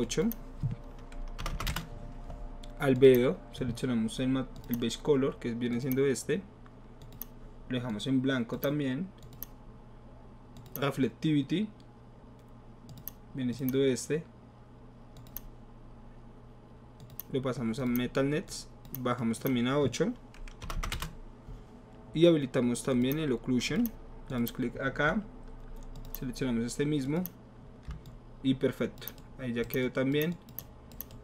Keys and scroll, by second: 1.4 BackSpace, 1.6 BackSpace, 1.6 KP_8, 1.7 Return, 20.6 BackSpace, 20.8 BackSpace, 20.8 KP_8, 20.9 Return.